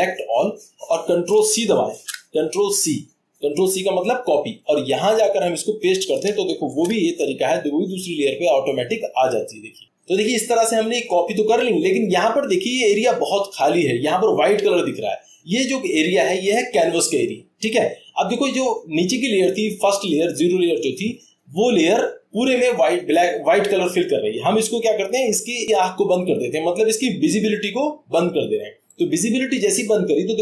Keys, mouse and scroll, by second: 1.9 ctrl+c, 5.2 click, 6.2 click, 6.6 ctrl+v, 8.6-9.7 drag, 28.9 click.